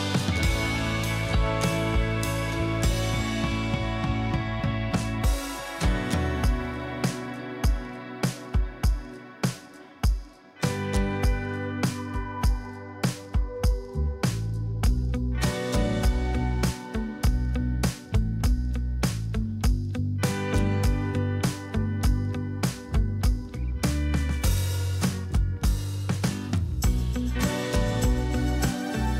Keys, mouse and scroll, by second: 3.8 double click, 8.9 double click, 10.1 Return, 10.2-10.6 alt+scroll up 2, 10.6 space.